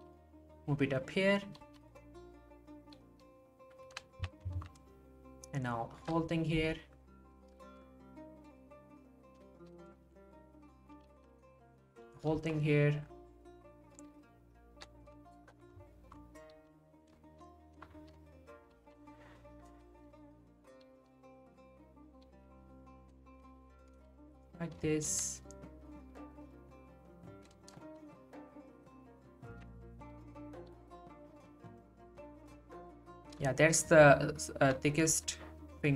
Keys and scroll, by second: 4.6 ctrl+z, 6.5 g, 11.1 g, 16.5 g, 18.7 g, 30.7 g, 35.1 g.